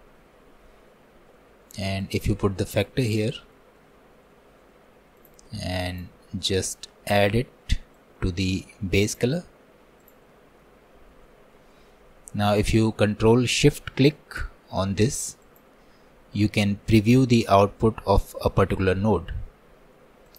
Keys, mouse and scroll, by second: 2.1-3.3 drag, 5.9-10.4 drag, 15.6-19.5 ctrl+shift+drag.